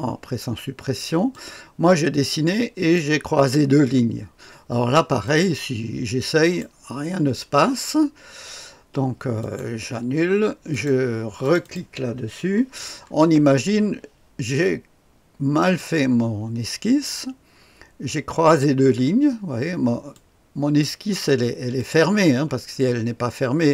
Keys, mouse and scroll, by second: 1.3-3.0 drag, 5.2 click, 6.4 click, 9.4 click, 10.7 click, 11.6 click, 13.0-15.6 scroll up 2, 15.6 click, 18.4 click, 20.1 click, 21.8 click.